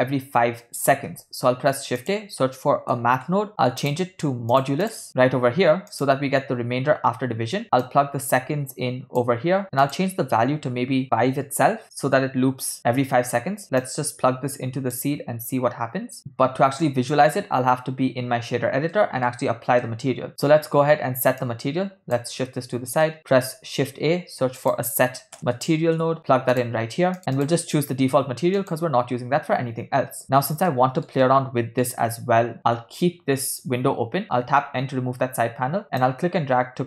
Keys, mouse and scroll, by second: 1.2 shift+a, 4.9-6.2 drag, 7.9 click, 8.1-9.3 drag, 9.9-11.3 drag, 13.9 drag, 14.3-15.4 drag, 19.2-19.6 ctrl+middle drag, 20.2 middle click, 20.6 ctrl+middle click, 21.6 click, 22.6 middle click, 23.2 ctrl+middle click, 23.7 shift+a, 27.6-29.3 drag, 30.8 ctrl+middle click, 31.4 middle click, 34.7 n, 36.1-36.8 drag.